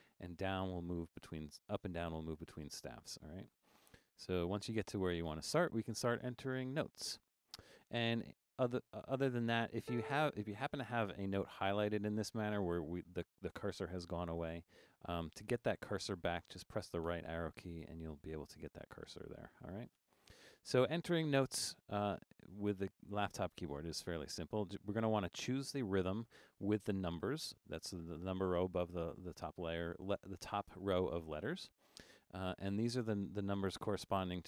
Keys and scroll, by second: 0.4 super+Down, 3.3 super+Left, 3.5 super+Left, 3.8 super+Left, 4.1 super+Up, 9.9 a, 11.1 Left, 17.1 Right, 20.0 BackSpace.